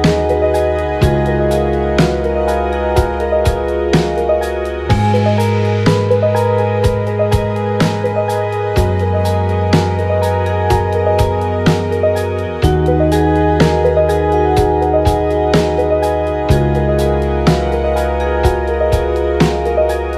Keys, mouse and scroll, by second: 0.5 Tab, 4.4 Tab, 14.5 click, 16.1 click, 17.0 click, 19.4 Tab.